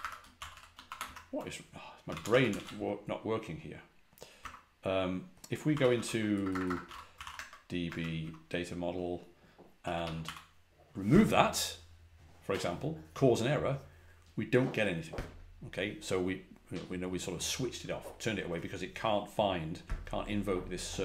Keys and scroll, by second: 0.0-0.4 typing, 0.9 Return, 1.7-2.9 typing, 4.0-8.1 typing, 9.5-10.6 typing.